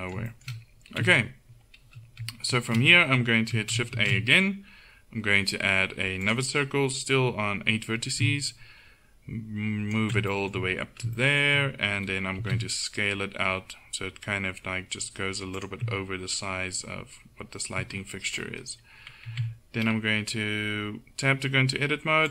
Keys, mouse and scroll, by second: 1.1 KP_1, 2.5 a, 4.0 shift+a, 8.6-10.4 drag, 10.4-11.8 middle drag, 12.5 s, 18.0-19.3 middle drag, 19.3 Tab.